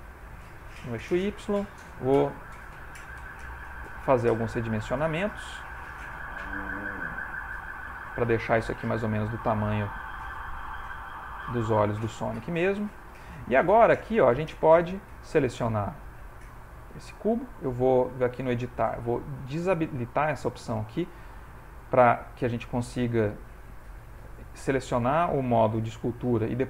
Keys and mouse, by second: 0.6 middle click, 4.8 middle click, 5.3 s, 7.4 click, 8.0 ctrl+middle click, 8.6 shift+middle click, 11.0 s, 11.6 g, 14.9 click, 18.2 click, 24.2 ctrl+Tab, 25.1 ctrl+Tab.